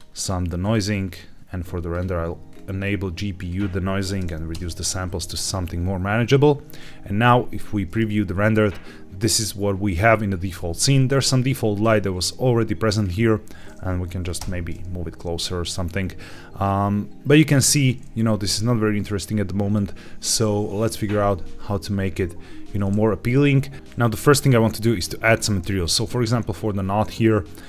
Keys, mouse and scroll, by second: 0.5 click, 1.0-1.8 scroll down 2, 1.8 click, 2.4-3.4 scroll up 1, 3.4-4.5 drag, 6.7 z, 11.0 click, 14.3 g, 17.2 click, 25.7 click, 27.4 click.